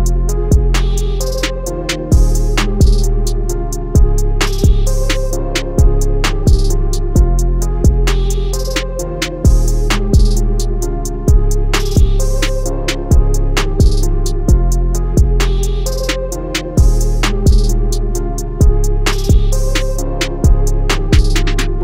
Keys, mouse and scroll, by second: 2.4 click, 4.4 click, 9.5 Escape, 11.1 click, 13.8 Escape, 14.3 click, 14.7 alt+scroll up 1, 15.0 scroll down 1, 15.9 click, 16.8 alt+scroll down 1, 17.6 alt+scroll down 1, 19.3 alt+scroll down 1, 19.8 scroll up 1, 20.5 click, 20.8 scroll up 1, 21.4 click.